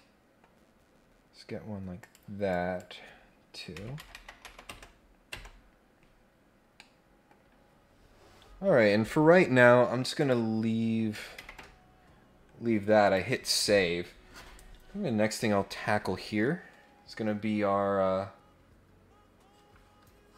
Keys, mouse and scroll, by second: 0.5 scroll down 1, 0.8 scroll up 1, 2.0 click, 2.5 click, 6.5 scroll down 4, 6.7 middle click, 7.5 scroll up 2, 7.6 scroll down 4, 8.2 scroll up 2, 10.2 click, 13.0 click.